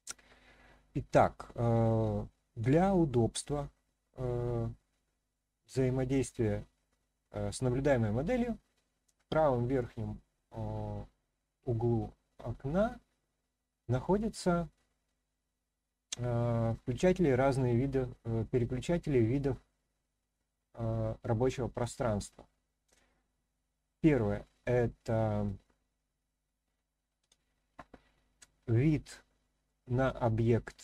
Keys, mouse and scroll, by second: 0.1-1.0 scroll down 1, 1.0-2.4 scroll up 1, 3.1-5.7 middle drag, 22.9 click, 27.2 click, 29.6-30.8 middle drag.